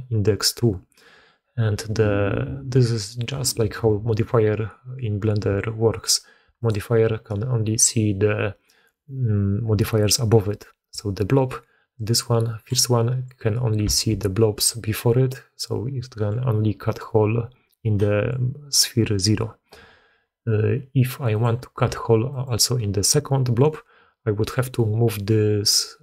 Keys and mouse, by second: 0.4 d, 0.5 d, 0.7 d, 6.5 click, 13.9 alt+a, 21.2 click, 21.7 g.